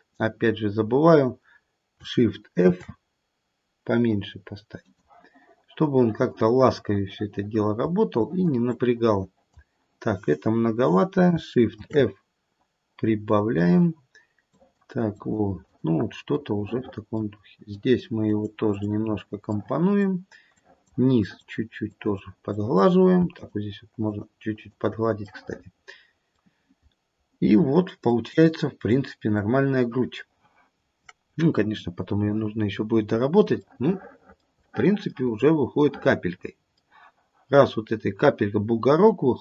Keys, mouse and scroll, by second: 2.6 shift+f, 5.9 click, 6.6 click, 8.2 click, 8.7 click, 11.7 shift+f, 14.5 click, 15.1 click, 15.6 click, 16.4 middle click, 17.7 click, 18.2 click, 18.6 click, 20.5 click, 20.5 middle click, 22.3 click, 22.6 click, 23.3 shift+click, 24.0 shift+click, 24.5 shift+click, 25.2 middle click, 25.4 middle click, 26.0 middle click, 26.8-28.0 scroll down 4, 28.0 middle click, 32.0-33.4 scroll up 5, 33.4 scroll up 1, 33.5 middle click, 34.3 middle click, 34.8 middle click, 35.0 middle click, 35.8 middle click.